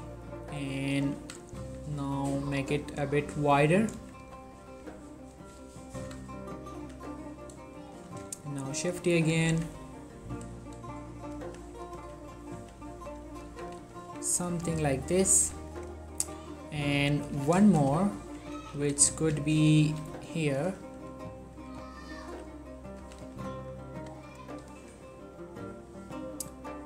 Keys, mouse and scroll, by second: 0.5 click, 1.3 s, 1.7 y, 2.8 click, 3.6 ctrl+middle click, 4.1-6.9 typing, 4.5 click, 5.2 click, 6.0 click, 7.8 click, 8.1 shift+middle click, 8.6 shift+d, 9.3 click, 9.6 r, 10.5 click, 11.5-14.2 typing, 11.9 click, 12.5 click, 13.2 click, 14.9-15.8 ctrl+middle drag, 15.8-16.3 drag, 16.3 3, 16.7-17.1 scroll up 2, 17.1-17.5 drag, 17.5 z, 17.8 shift+middle click, 18.1-18.7 ctrl+middle drag, 18.7 1, 19.8 shift+d, 20.5 click, 21.7 r, 22.2 click, 22.4 g, 23.0 click, 23.1 z, 23.5 middle click, 24.2-25.2 scroll down 3, 24.4 click, 24.8 middle click, 25.2 ctrl+middle click, 26.0-26.8 middle drag.